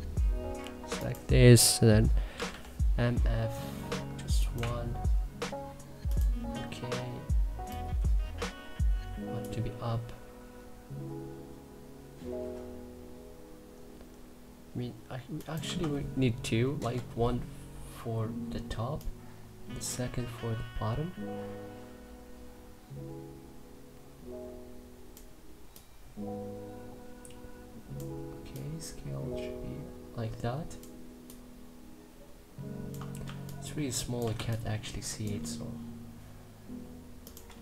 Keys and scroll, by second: 1.7-2.6 typing, 4.2 1, 15.3 2, 16.4 Return, 32.9 2, 37.3 3.